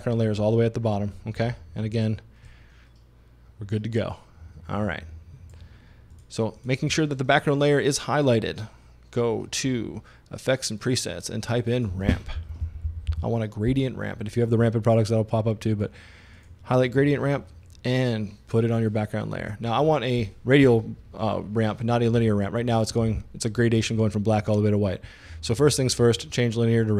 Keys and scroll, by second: 12.2-13.6 typing.